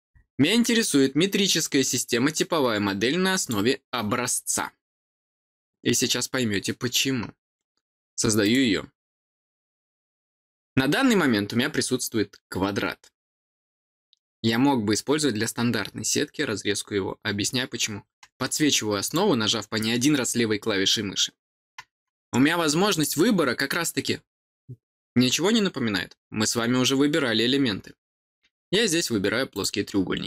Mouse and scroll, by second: 3.3 click, 8.3 click, 19.0 click, 22.8 click, 29.5 click.